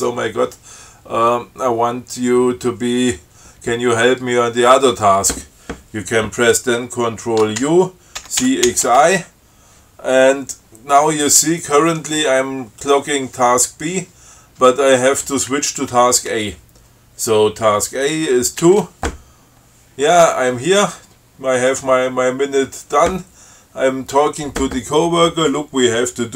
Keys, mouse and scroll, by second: 7.9 ctrl+u, 8.7 ctrl+x, 8.9 ctrl+i, 18.9 2.